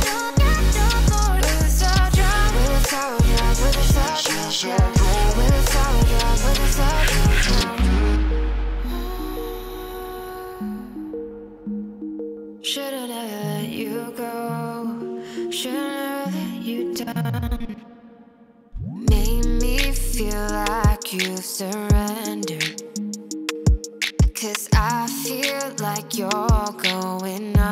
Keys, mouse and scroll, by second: 0.4 click, 1.3 click, 2.3 click, 4.2 click, 5.8 click, 8.6 click, 9.0-13.3 drag, 20.9-21.3 drag, 21.5-23.2 drag, 23.6 click, 26.5 click, 27.3 click.